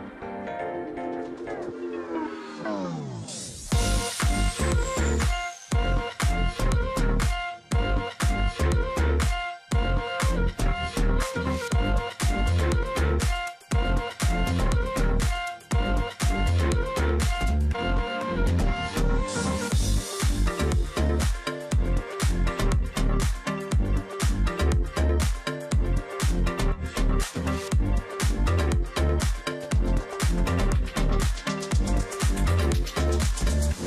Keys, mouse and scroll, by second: 0.3 space, 2.0-2.6 alt+scroll up 1, 3.1 space, 3.5 alt+scroll up 1, 3.7 space, 4.6 space, 4.8 double click, 6.0 space, 8.7 ctrl+z, 9.2 alt+scroll down 1, 11.7-12.4 alt+scroll up 1, 12.4 ctrl+click, 13.3 space, 14.0 ctrl+click, 14.9-15.4 alt+scroll down 1, 16.4 shift+x, 16.5 space, 17.2 ctrl+shift+click, 18.5 alt+click, 18.9 ctrl+click, 19.6-20.1 alt+scroll down 1, 20.1 alt+scroll up 1, 20.3 space, 23.7 alt+scroll up 1, 24.5 space, 25.2 ctrl+click, 25.5 alt+scroll down 1, 25.8 space, 26.5 space, 27.3 space, 28.2 ctrl+z, 28.5 space, 29.4 space, 31.2 ctrl+z, 31.8 ctrl+click, 32.8 space.